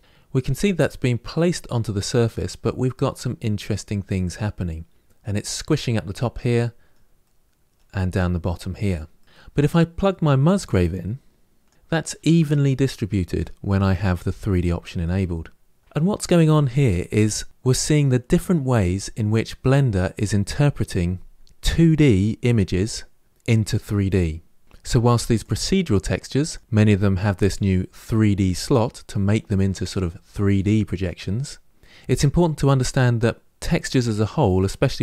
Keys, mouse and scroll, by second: 0.0-2.1 middle drag, 2.1-2.5 scroll down 1, 2.5 middle click, 3.0-4.9 scroll up 2, 4.9-6.3 scroll up 1, 6.3-9.2 middle drag, 9.2 scroll down 3, 11.5 click, 11.7-25.2 middle drag, 25.2 click, 33.6 click.